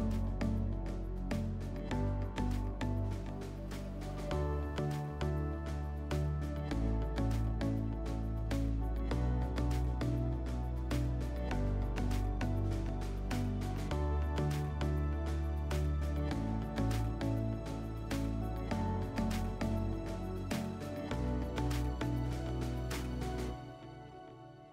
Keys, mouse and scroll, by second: 5.5-7.4 drag, 7.4-24.7 middle drag.